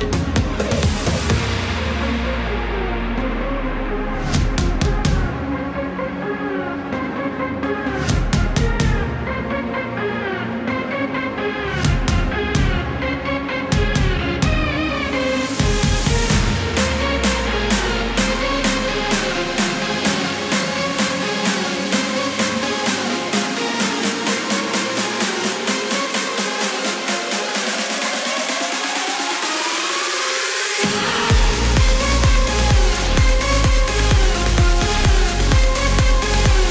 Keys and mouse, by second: 4.8 click, 5.9 KP_4, 6.2 Return, 7.9-9.2 typing, 11.7 click, 12.6 KP_8, 12.9 Return, 14.7-16.7 typing, 21.3 right click, 21.8 click, 23.5 click, 25.0 click, 26.6 click, 28.0 click, 29.5 click, 30.3 click, 31.2 click, 32.4 right click, 33.9 click, 34.8 KP_Subtract, 35.4 KP_7, 35.6 Return.